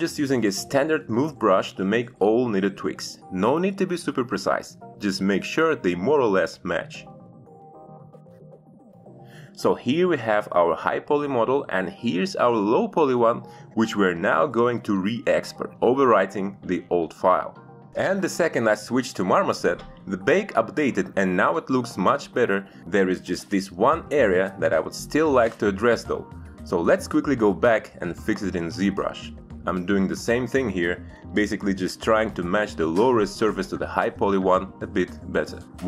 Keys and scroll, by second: 10.1 shift+f, 30.4 alt+Tab.